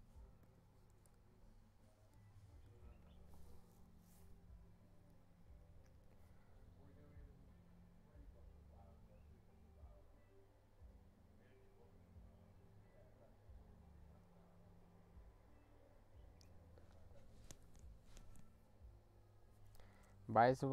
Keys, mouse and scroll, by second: 0.4 click, 2.2-2.6 scroll down 1.